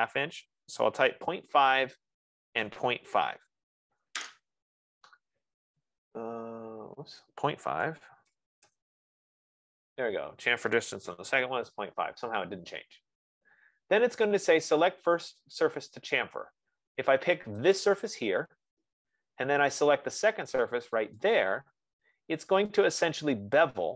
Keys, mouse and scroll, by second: 0.7-1.8 typing, 1.8 Tab, 2.8-3.9 typing, 7.0-9.1 typing, 11.3 Return, 11.9 F15, 18.0-21.3 drag.